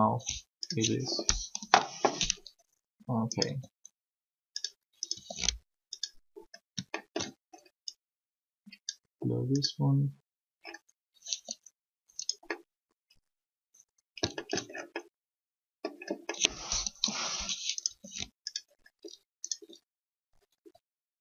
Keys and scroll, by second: 1.6 3, 11.3 r, 16.9 3, 20.5 r.